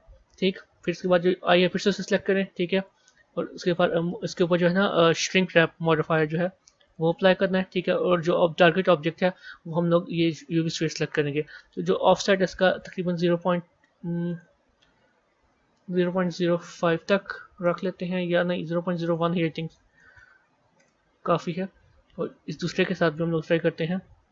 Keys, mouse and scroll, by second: 0.4-2.7 middle drag, 2.7 click, 3.6-6.7 drag, 8.5 click, 12.7-16.0 drag, 16.0 KP_0, 17.5-18.9 middle drag, 18.9 click, 19.9 KP_0, 22.4 click, 23.3-24.3 drag.